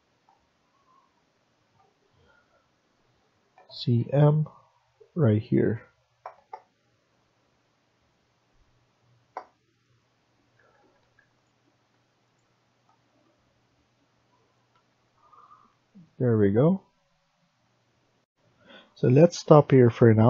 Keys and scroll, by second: 3.5-3.9 typing, 9.1 Escape, 14.6 Escape, 18.1 F1.